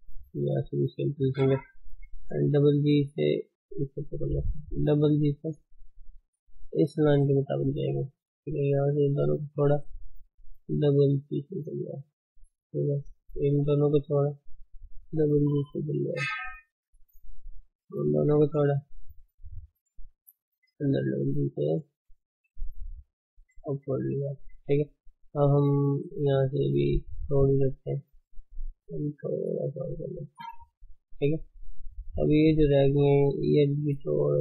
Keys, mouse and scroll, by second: 0.3 ctrl+click, 1.8 g, 4.2 shift+click, 5.1 g, 9.4 ctrl+click, 10.4 g, 13.8 ctrl+click, 14.8 g, 18.4 ctrl+click, 18.8 shift+middle click, 19.3 scroll up 1, 19.5 shift+z, 20.7 g, 23.8 shift+z, 25.1-25.5 scroll down 2, 25.5 scroll up 3, 26.9 ctrl+click, 27.9 ctrl+click, 28.8 g, 31.3 scroll down 2, 31.5 shift+middle click, 31.9 scroll up 3, 32.7 click, 33.7 g.